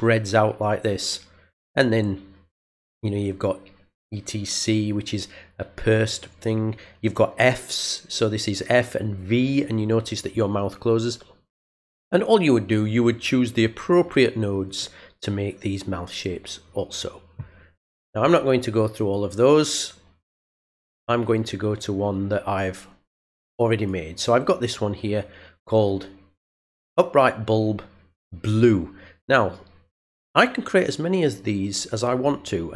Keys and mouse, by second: 11.7 click, 14.6 click, 18.9 click, 23.7 click, 30.1 click.